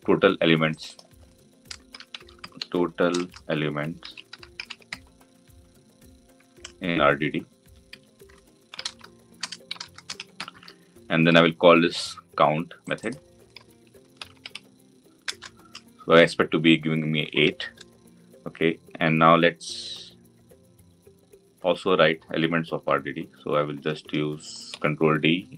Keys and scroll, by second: 15.1 Return, 24.6 ctrl+d.